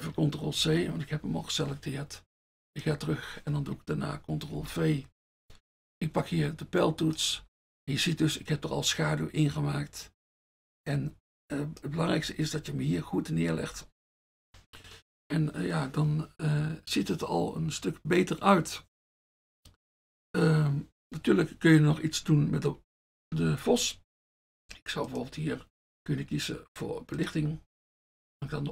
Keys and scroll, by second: 0.6 ctrl+c, 4.6 ctrl+v, 5.9 F1, 7.4 F1, 12.5 F1, 13.7 F1, 22.5 F1, 22.8 F1, 27.6 F1.